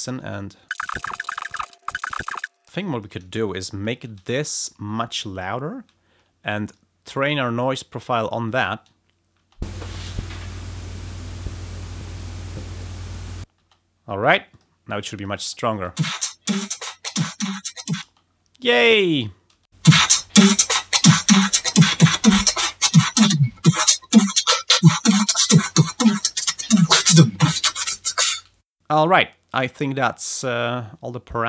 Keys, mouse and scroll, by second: 2.8 click, 4.1 alt+6, 6.5 alt+click, 8.4 click, 9.3 space, 13.5 space, 14.1 click, 14.4 click, 15.1 click, 15.7 space, 17.2 click, 18.0 space.